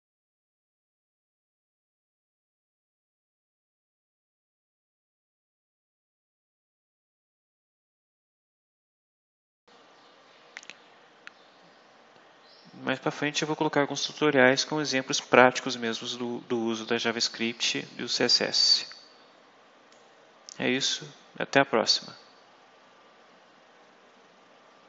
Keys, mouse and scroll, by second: 2.3 click, 5.7 click, 9.4 click, 9.6-10.2 scroll up 4, 11.4 scroll up 2, 19.8-20.9 drag.